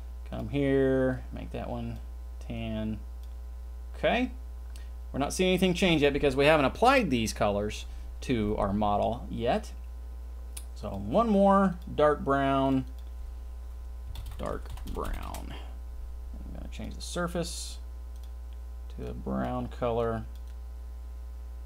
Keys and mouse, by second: 10.9 click, 11.8 click, 12.6 click, 12.8-15.3 drag, 16.7 click, 18.1 click.